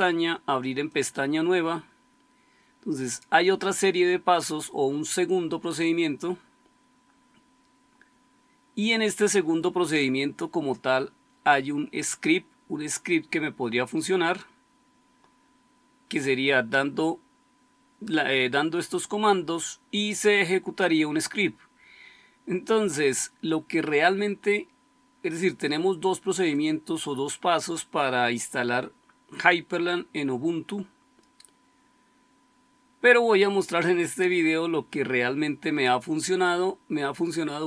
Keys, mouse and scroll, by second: 0.9-4.3 scroll down 1, 4.3-6.7 scroll down 1, 6.7-7.5 scroll down 1, 7.5-14.1 scroll down 1, 14.1-15.3 scroll down 1, 21.5-26.4 scroll down 1, 26.4-37.6 scroll down 1.